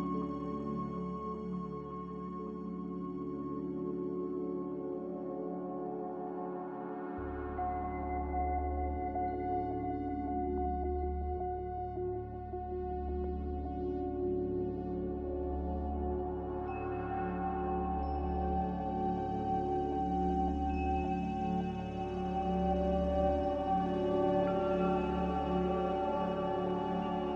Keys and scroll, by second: 4.1 ctrl+z, 9.1 a, 9.1 f.